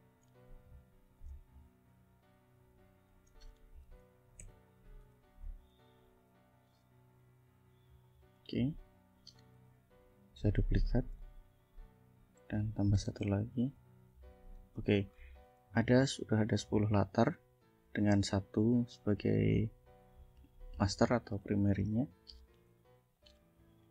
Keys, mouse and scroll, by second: 0.8 click, 1.2 shift+click, 1.5 shift+click, 2.2 ctrl+shift+click, 3.1 ctrl+shift+click, 3.8 ctrl+d, 5.2 ctrl+shift+z, 6.0 shift+click, 7.1 click, 7.7 click, 8.3 click, 9.6 ctrl+d, 10.0 ctrl+click, 11.2 ctrl+click, 12.5 click, 13.4 ctrl+d, 13.8-14.8 ctrl+drag, 15.2 ctrl+shift+scroll up 2, 15.8 ctrl+shift+scroll down 2, 16.4 ctrl+click, 17.7 ctrl+click, 18.4 ctrl+click, 18.9 ctrl+click, 19.5 ctrl+click, 21.4 click, 21.9 click, 22.8 ctrl+shift+g, 23.2 ctrl+shift+click, 23.6 ctrl+shift+click.